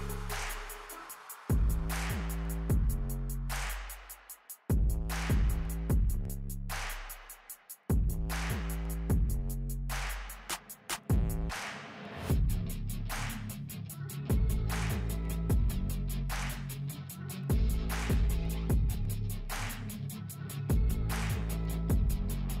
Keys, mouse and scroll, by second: 0.3-6.8 drag, 6.8 scroll down 1, 7.5 click, 8.4-9.7 alt+drag, 9.7-10.5 scroll down 1, 10.5 F4, 12.4 click, 13.5 Delete, 14.0 F4, 15.1-20.5 alt+drag, 20.2 right click, 21.2 scroll down 1.